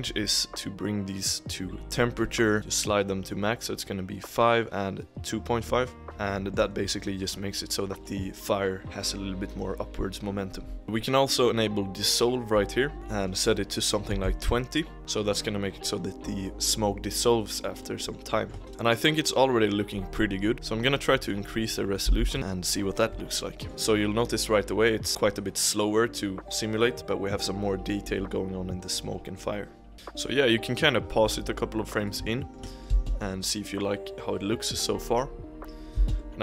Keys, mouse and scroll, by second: 3.8 click, 6.0 click, 6.3-8.8 shift+middle drag, 10.8-12.8 drag, 12.9-15.0 drag, 17.5-18.0 drag, 18.0-18.4 middle drag, 18.7 space, 20.5 click, 22.6-23.7 drag, 29.9-31.9 shift+middle drag, 31.9-32.4 drag, 32.4-32.9 shift+middle drag, 32.9 space, 33.6-36.1 middle drag, 36.1 space, 36.2-36.4 middle drag.